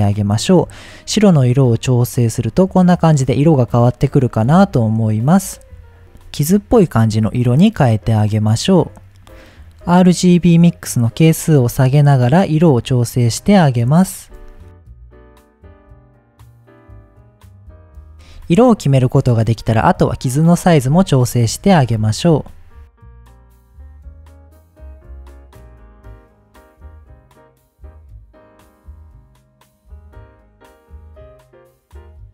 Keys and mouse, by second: 0.6 click, 10.3-11.8 drag, 12.4-13.9 drag, 14.9-16.9 drag, 17.6 shift+click, 18.0 shift+drag, 19.0 click, 20.2 shift+click, 21.0 shift+click, 22.4-23.4 shift+drag, 24.1 click, 24.8 ctrl+shift+click, 25.4 shift+click, 26.1-27.1 shift+drag, 27.6 shift+click, 28.6 shift+click, 29.5 ctrl+shift+click, 31.6-32.1 shift+middle drag.